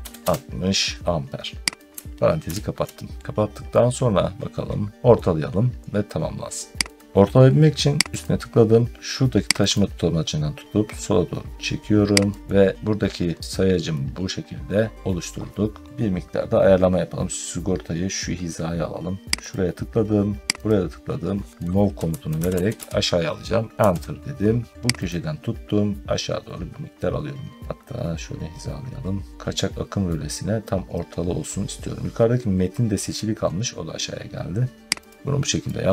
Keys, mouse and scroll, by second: 0.0-2.3 typing, 1.8 click, 5.0 middle click, 6.8 click, 8.0 click, 9.6 click, 12.3 click, 12.4 scroll down 2, 13.1-14.0 scroll up 1, 14.1 scroll, 16.9 scroll, 19.4 click, 20.6 click, 21.6-23.1 typing, 23.7 Return, 24.7 middle click, 25.0 click, 27.6 middle click, 29.3-29.9 scroll down 3, 30.0 scroll, 34.9 click, 35.4 scroll down 1.